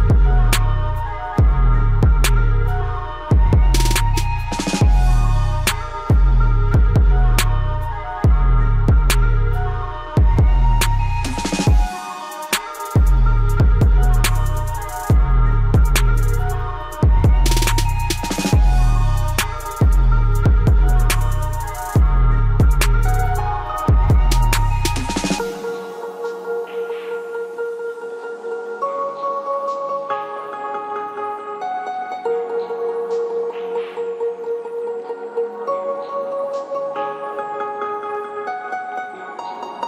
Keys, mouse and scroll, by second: 0.8 scroll up 1, 1.5 click, 1.5 typing, 2.0 scroll down 1, 2.9-6.0 drag, 7.9 click, 8.0 typing, 10.8-13.0 alt+drag, 15.3 scroll down 1, 16.2 right click, 23.4-25.5 drag, 23.5 typing, 25.5 scroll up 1, 27.8-35.6 drag, 35.6 scroll down 1, 36.9-39.8 drag.